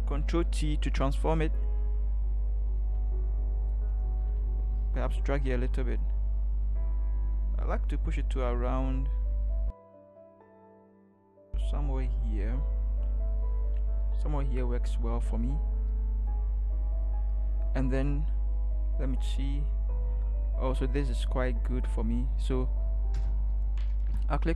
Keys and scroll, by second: 0.2 ctrl+t, 23.2 Return.